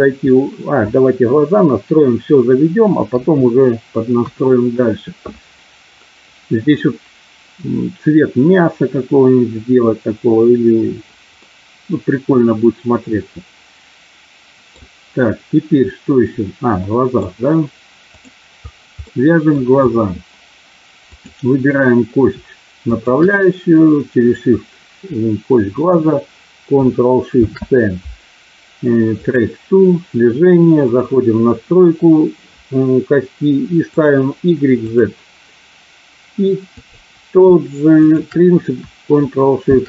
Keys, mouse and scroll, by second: 3.1 KP_3, 3.6 KP_3, 4.1 KP_1, 11.3-14.9 middle drag, 16.9 middle click, 19.1 middle click, 21.1 click, 22.9 shift+click, 27.2 ctrl+shift+c, 33.9 click, 34.9 click, 36.7 click, 38.0 shift+click, 39.6 ctrl+shift+c.